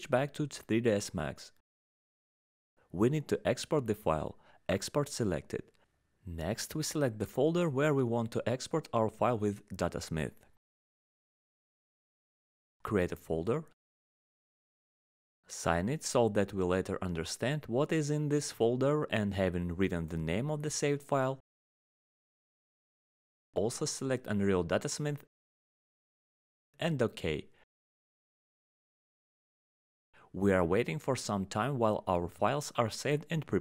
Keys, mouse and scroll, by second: 0.0 alt+middle click, 1.4 alt+middle click, 1.9-2.2 scroll, 3.3 click, 4.2 click, 4.9 click, 8.2 click, 8.9 ctrl+click, 10.4 right click, 12.3 middle click, 13.2 ctrl+right click, 13.8 right click, 21.7 click, 22.1 click, 22.4 click, 23.7 click, 24.5 click, 32.8 click.